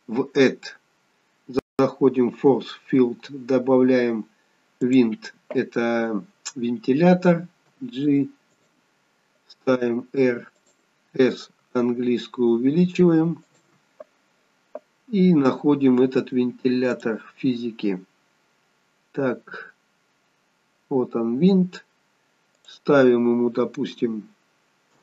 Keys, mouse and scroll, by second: 7.6 g, 9.6 r, 11.5 s, 16.8 click, 20.3-22.5 scroll down 1, 22.5 click.